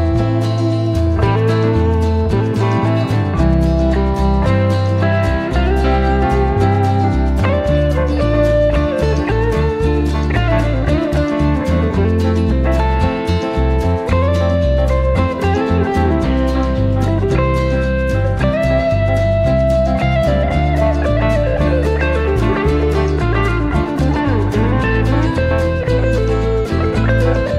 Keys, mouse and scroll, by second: 0.1 click, 1.2-3.8 drag, 4.5 click, 6.3-7.8 drag, 9.1 ctrl+d, 10.7 click, 12.7-16.0 drag, 16.4 click, 17.7 click, 19.3 click, 21.4 space, 22.7 KP_Subtract, 23.7 space.